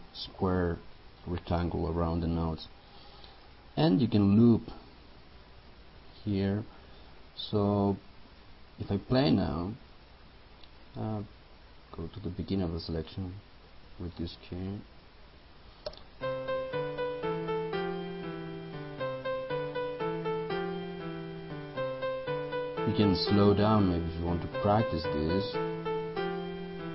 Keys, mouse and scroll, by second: 5.7-13.7 drag, 15.9 space, 23.1-25.8 drag.